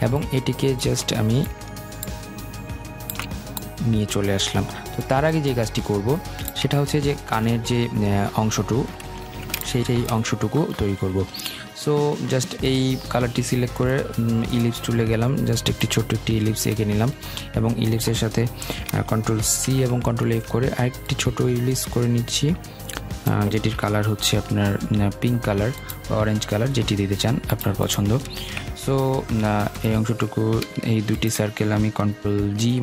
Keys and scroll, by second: 19.4 ctrl+c, 19.6 ctrl+f, 32.3 ctrl+g.